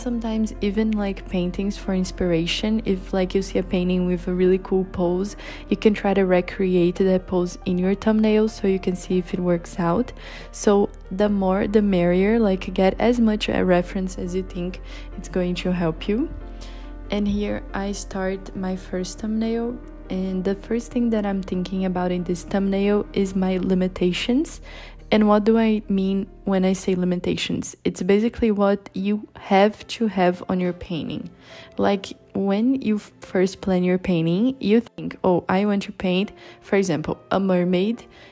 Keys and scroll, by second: 27.2 z, 28.0 h, 28.5 z, 32.3 b.